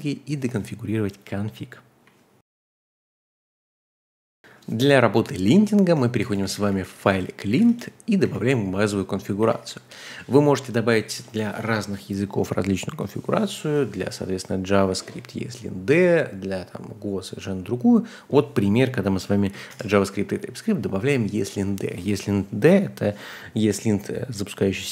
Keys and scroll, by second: 5.1-8.2 typing, 9.4-10.0 typing, 11.1 typing, 12.7-13.1 typing, 19.2-20.2 typing.